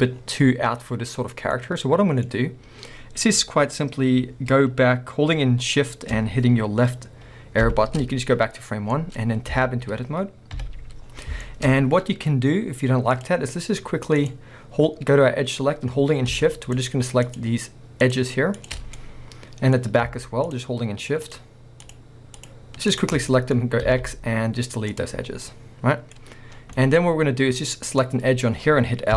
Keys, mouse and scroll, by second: 0.2-0.8 scroll down 2, 0.8-1.3 scroll up 2, 1.3 scroll down 2, 1.5-7.8 middle drag, 7.8 shift+Left, 8.7 scroll down 1, 9.0 middle click, 9.3 scroll up 1, 9.5 b, 10.6 KP_1, 11.1 scroll up 1, 11.4 shift+middle click, 11.7 scroll up 1, 13.2 click, 16.6 shift+click, 18.9 scroll down 1, 19.0 middle click, 19.8 scroll up 1, 20.5 shift+click, 23.3 middle click, 25.2 scroll down 1, 25.4 middle click, 26.5 scroll down 1, 26.8 middle click, 27.1 scroll up 1, 27.9 click.